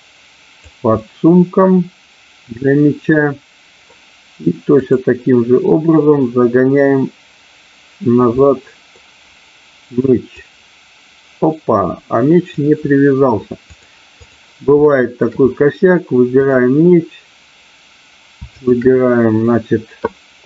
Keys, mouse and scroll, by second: 0.8-4.2 middle drag, 4.8-6.0 drag, 8.5 middle click, 10.3-12.5 drag, 13.7 click, 14.7 shift+middle click, 16.5 click, 18.6 shift+click.